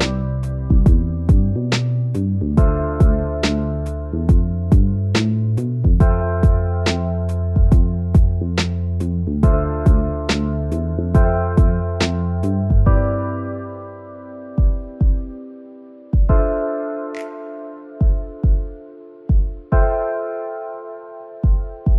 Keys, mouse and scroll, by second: 6.1-6.7 scroll, 6.7 e, 7.5 middle click, 7.9 scroll up 1, 8.3 middle click.